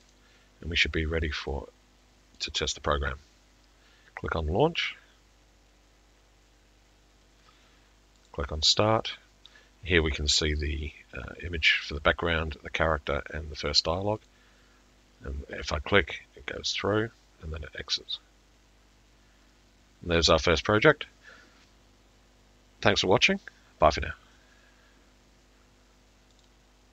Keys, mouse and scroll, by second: 2.4 click, 4.9 click, 8.3 click, 16.7 click, 26.4 click.